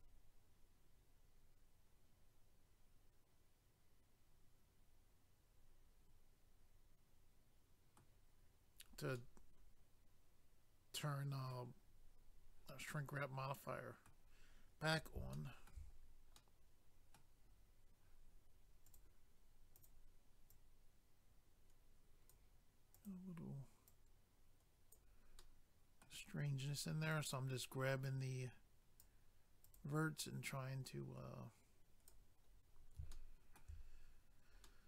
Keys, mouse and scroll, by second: 9.2 middle click, 12.9 middle click, 14.8-15.3 scroll up 1, 15.3 shift+middle click, 15.9-16.4 scroll up 1, 16.4 middle click, 18.8 click, 18.9 click, 19.8 click, 19.8 click, 20.5 click, 22.9 click, 23.1 click, 23.9 click, 25.4 middle click, 27.1 click, 29.6 click, 29.8 click, 30.4 click, 32.6 scroll up 1, 33.1 shift+middle click, 33.9-34.7 scroll up 1, 34.7 middle click.